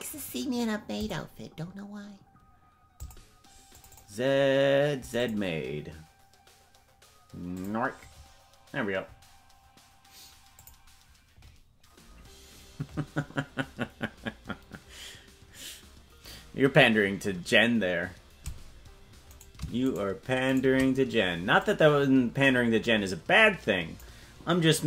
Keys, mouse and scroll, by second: 19.4 right click, 21.6-24.0 drag.